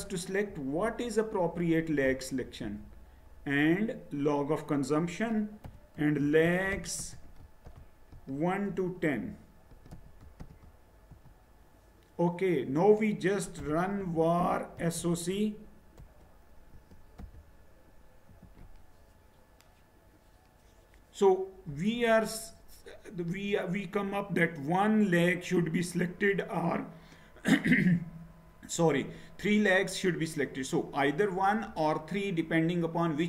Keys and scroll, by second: 5.6-8.6 typing, 9.7-10.3 typing, 11.1 Return, 13.4-18.7 typing.